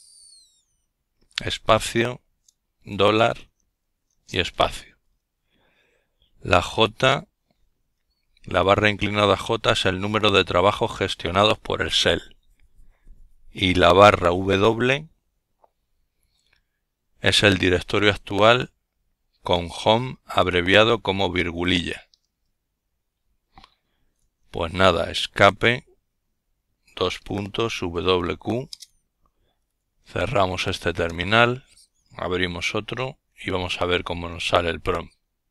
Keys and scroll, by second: 0.9 Right, 1.2 Right, 3.7 typing, 21.3 Escape, 23.1-24.1 typing, 24.6 Return, 25.4-27.0 typing, 29.2 ctrl+alt+t, 35.1 ctrl+alt+t.